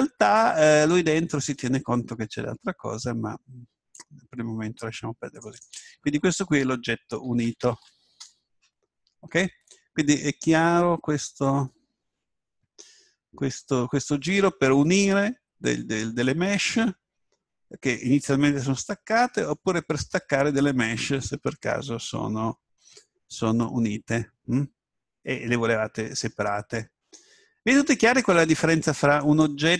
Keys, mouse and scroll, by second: 0.8-2.7 drag, 5.4-7.5 drag, 23.3-26.2 middle drag, 27.5-28.0 scroll down 1, 28.0-29.7 middle drag.